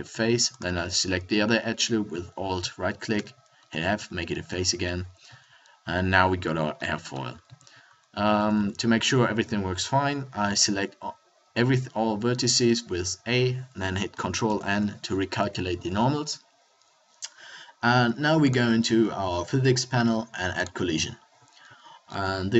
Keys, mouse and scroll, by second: 3.2 f, 3.9 Tab, 5.2 z, 7.4 z, 7.8 Tab, 8.3 a, 8.6 a, 14.4 ctrl+n, 15.4 Tab.